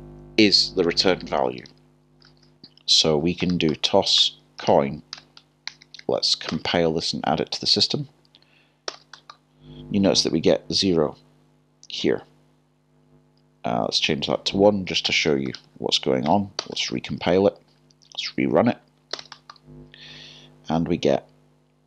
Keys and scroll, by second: 2.3 Return, 2.4-3.9 typing, 7.8 typing, 8.9 j, 16.3 Return, 17.6 typing, 19.1 typing.